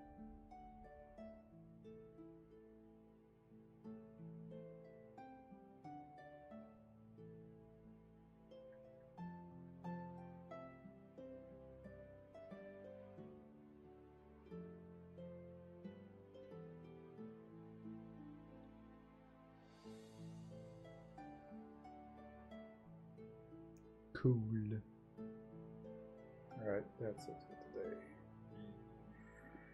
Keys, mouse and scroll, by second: 0.7 ctrl+z.